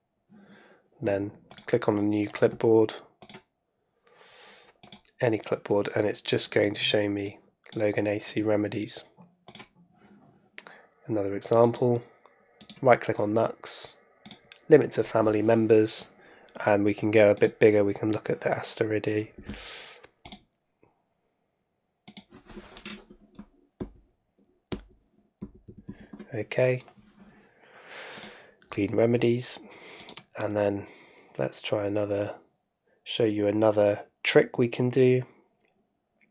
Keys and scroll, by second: 23.8 super+Right, 24.7 super+Right, 25.4 super+Left.